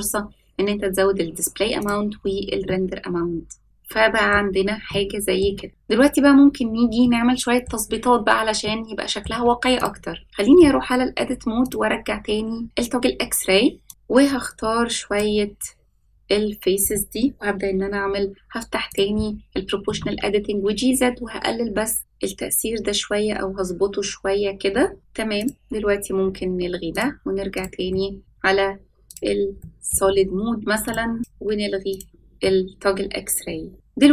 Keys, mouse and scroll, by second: 1.8 click, 2.1-2.6 scroll down 1, 2.6-4.3 middle drag, 4.3 scroll down 4, 4.5 scroll up 1, 4.9-5.4 shift+middle drag, 5.7-7.0 scroll down 1, 7.0 middle click, 8.6-9.2 shift+middle drag, 9.7 click, 10.2 Tab, 11.6-12.6 drag, 13.8 click, 14.4 click, 18.8 click, 19.8 g, 25.3 click, 27.0 click, 27.5 click, 27.9 middle click, 29.1 click, 29.6 middle click, 30.8-31.2 drag, 31.9 click, 32.4-33.7 middle drag, 33.7 scroll up 3.